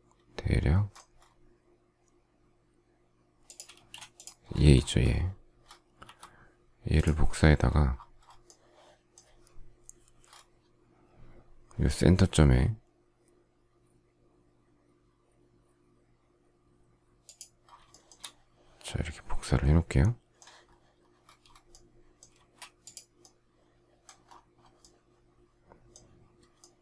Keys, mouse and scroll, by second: 3.7 space, 6.0 m, 17.8 shift+middle click, 22.3 space.